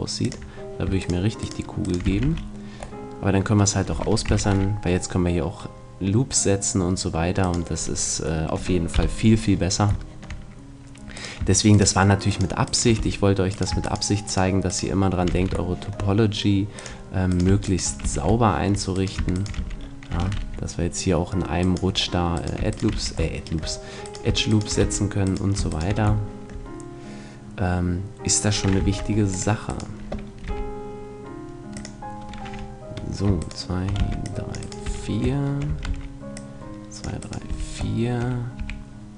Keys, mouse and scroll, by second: 0.9 click, 2.1 right click, 2.1 f, 2.2 a, 2.3-3.5 middle drag, 4.5 ctrl+r, 7.6 right click, 8.5 middle click, 8.9 KP_1, 9.5-11.3 middle drag, 11.1 right click, 12.1-16.3 right drag, 12.9 f, 15.3 f, 16.9-18.0 drag, 17.3 middle click, 17.3 right click, 18.0 f, 18.5 click, 18.5 middle click, 18.5 right click, 19.5 f, 20.3 ctrl+r, 22.9 f, 24.8 f, 26.9 right click, 28.8 ctrl+Tab, 29.7-31.5 right drag, 30.5 g, 31.8 click, 33.4 middle click, 33.8-35.4 right drag, 34.0 c, 34.9 f, 35.4 middle click, 35.7 a, 35.9 c, 37.5 f, 38.6 a.